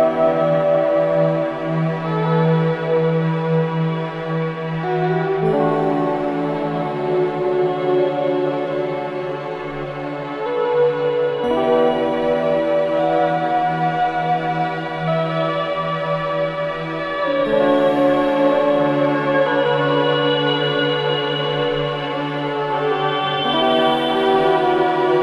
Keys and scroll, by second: 7.8 space, 8.8 space, 8.8 m, 11.1 v, 12.1 i, 24.7 KP_9, 25.1 KP_0, 25.1 Return.